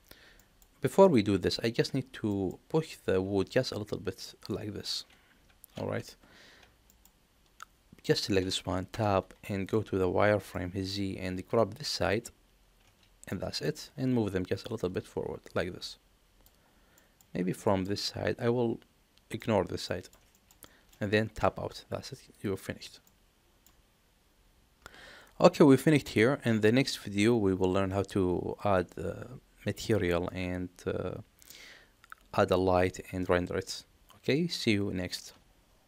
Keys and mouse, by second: 0.3 middle click, 2.4 middle click, 6.8 middle click, 8.8 Tab, 9.3 middle click, 9.8 z, 10.4 middle click, 11.5 click, 12.7 z, 13.2 middle click, 14.9-16.3 drag, 16.8 middle click, 17.5 shift+middle click, 17.9-19.3 middle drag, 19.8 middle click, 20.2 shift+middle click, 20.6 middle click, 21.2 Tab, 23.0 middle click, 25.9-35.2 middle drag.